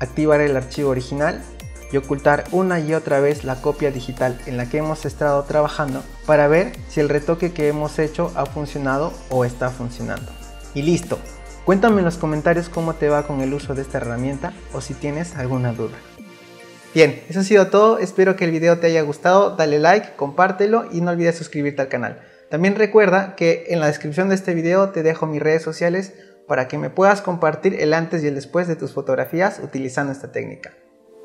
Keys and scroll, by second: 16.4 alt+F9.